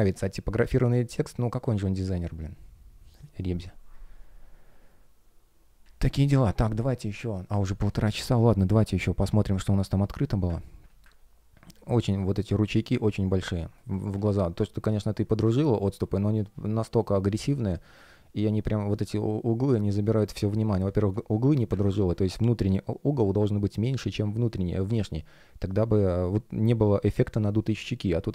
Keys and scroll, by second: 11.6 F1, 12.5 shift+щ, 12.8 shift+п, 13.4 space, 20.4 space.